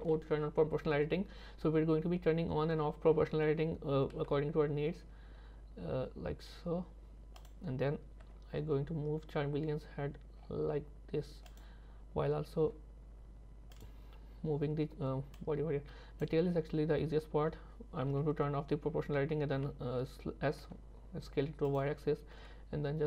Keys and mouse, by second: 0.1 o, 4.2 s, 8.3 g, 12.6 r, 15.5 click, 18.1 o, 19.6 s, 22.4 g.